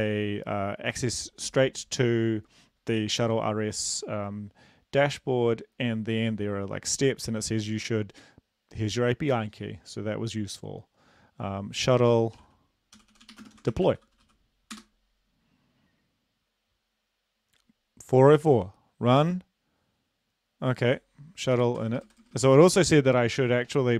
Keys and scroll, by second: 12.1-14.6 typing, 14.7 Return, 21.5 Up, 21.8-22.4 typing.